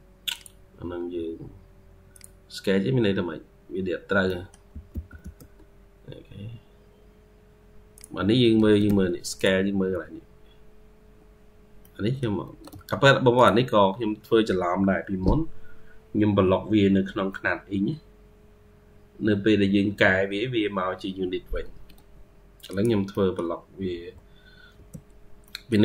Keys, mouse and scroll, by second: 2.9-3.7 scroll up 3, 3.1-4.6 typing, 4.1 middle click, 8.4 Escape, 8.7 Escape, 11.2-11.7 scroll down 2, 11.7 middle click, 12.3 Escape, 12.5 Escape, 21.6 Escape, 21.8 Escape, 23.0 middle click, 23.7 e, 25.0 scroll, 25.0 scroll down 1, 25.3 middle click.